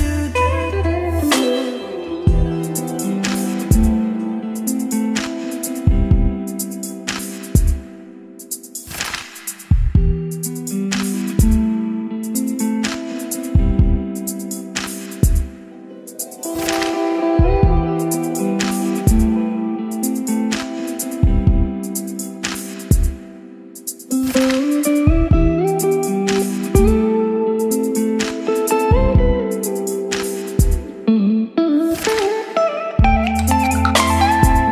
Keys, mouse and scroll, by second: 2.9 Return, 3.9-5.9 drag, 5.9 Tab, 5.9-11.7 typing, 13.6 Return, 15.8-16.8 typing, 16.9 Return, 18.0-19.3 typing, 19.5 click.